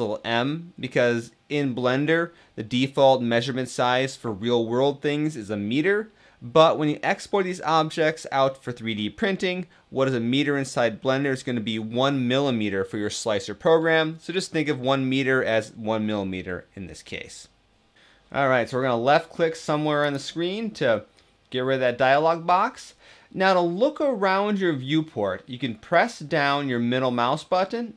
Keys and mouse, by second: 21.5 click, 27.1-27.9 middle drag.